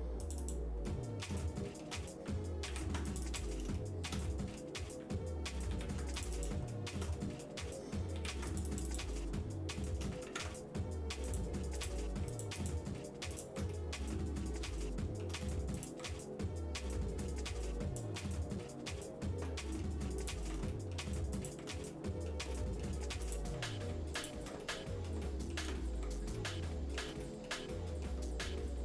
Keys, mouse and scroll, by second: 0.9 middle click, 1.4 shift+middle click, 2.7 ctrl+r, 3.8 shift+middle click, 4.3 middle click, 5.7 ctrl+r, 6.7 shift+middle click, 7.1 middle click, 8.2 ctrl+r, 8.9 click, 9.4 shift+middle click, 10.2 ctrl+Tab, 11.8 click, 12.3 alt+shift+click, 13.3 alt+shift+click, 13.7 middle click, 14.7 shift+middle click, 15.8 alt+shift+click, 17.2 click, 18.2 middle click, 19.5 shift+middle click, 20.2 alt+shift+click, 20.7 shift+middle click, 21.3 alt+shift+click, 21.9 middle click, 22.5 shift+middle click, 23.2 alt+shift+click, 24.3 alt+shift+click, 24.6 middle click, 25.2 shift+middle click, 26.4 shift+middle click, 27.2 middle click, 27.7 shift+middle click.